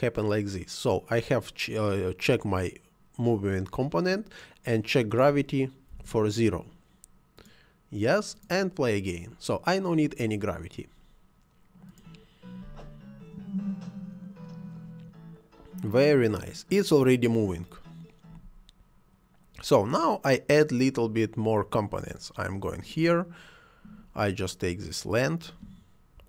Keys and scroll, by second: 5.9 0, 6.0 Return, 12.6 space, 18.2 Escape.